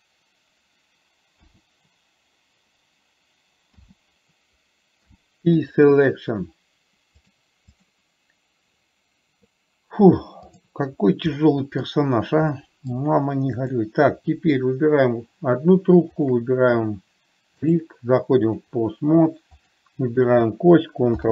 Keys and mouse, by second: 4.1 l, 5.4 p, 7.6-8.2 drag, 11.7-12.2 middle drag, 12.9-13.4 middle drag, 14.1 click, 18.1 click, 20.0 click.